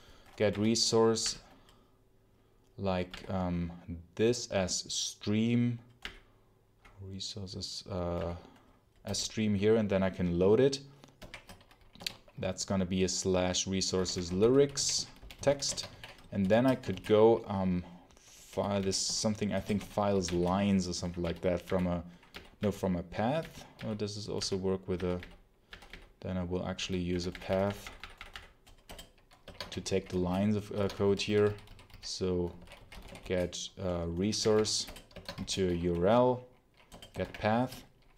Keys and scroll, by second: 0.0-0.1 typing, 0.4 Down, 1.1 Up, 3.0 Down, 5.9 Up, 8.0 Down, 8.9 Return, 11.1 shift+', 11.8 /, 13.6-20.7 typing, 21.1 Down, 21.5 Up, 22.2 Down, 22.4 Down, 23.3 Down, 23.6 Down, 24.2 Up, 24.8 Down, 25.5 Down, 25.8 Down, 26.6 Down, 27.0 Up, 28.7 Return, 29.2-33.6 typing, 30.6 Escape, 34.3 Down, 34.7 Return, 35.0 Escape, 35.5 ., 36.8 Return, 37.1 shift+0.